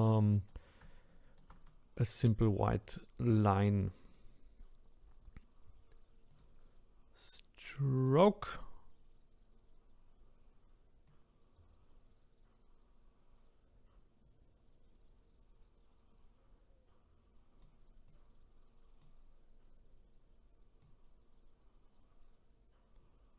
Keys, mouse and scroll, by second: 6.3-9.3 drag, 11.0-23.3 drag.